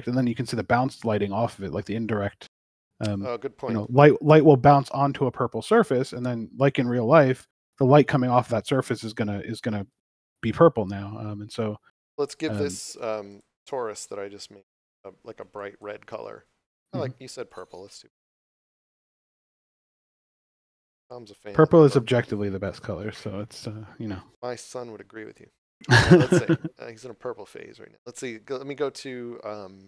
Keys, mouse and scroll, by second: 2.0 click, 2.8 scroll down 1, 6.6 g, 8.0 click, 10.6 click, 13.3 click.